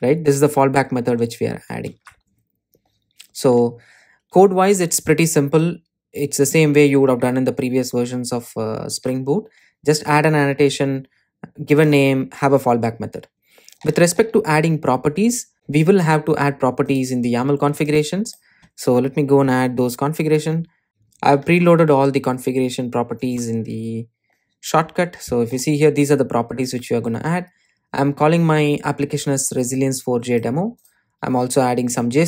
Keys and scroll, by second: 1.2 super+s, 8.7 super+c, 15.5 super+e, 20.9 super+a, 27.5 Return.